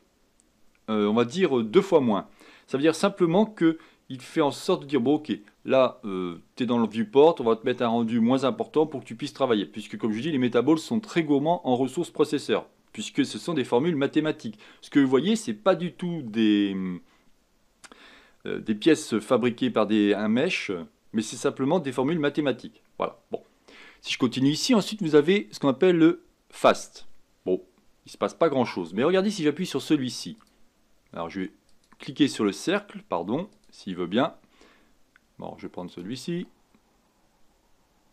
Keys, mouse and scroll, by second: 25.1-28.2 drag, 29.6 click, 30.3 click, 31.7 click, 32.6 click, 33.5-36.0 drag.